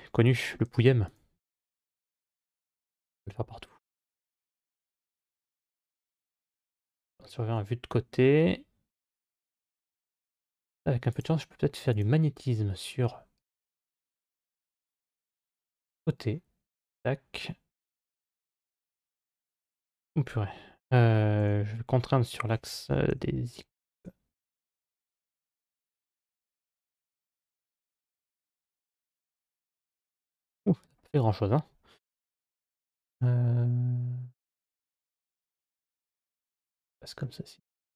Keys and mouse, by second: 0.9 alt+right click, 6.9 KP_3, 10.9 click, 11.7-16.3 drag, 18.0 g, 32.9-36.1 drag, 36.5 middle click.